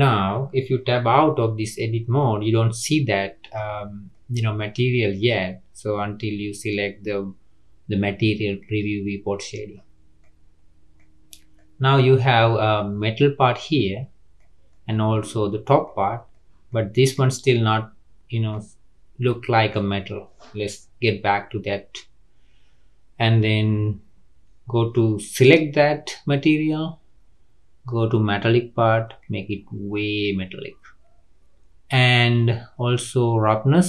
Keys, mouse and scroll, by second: 1.2 Tab, 1.6 click, 2.2-3.7 middle drag, 3.7-4.1 scroll down 1, 4.1-7.1 middle drag, 9.1 click, 10.2-11.2 middle drag, 11.2-11.5 scroll up 1, 11.5-12.1 middle drag, 12.1-12.4 scroll down 3, 12.4-13.0 middle drag, 13.0 scroll up 4, 13.7-16.0 middle drag, 16.0-16.4 scroll down 3, 16.4 middle click, 17.2 click, 17.5-18.7 middle drag, 18.7-19.4 scroll down 2, 19.4-21.1 middle drag, 21.1 Tab, 23.7-25.2 scroll up 10, 25.2 click, 26.7-29.2 scroll down 6, 29.2-31.2 drag, 31.2-33.8 scroll down 2.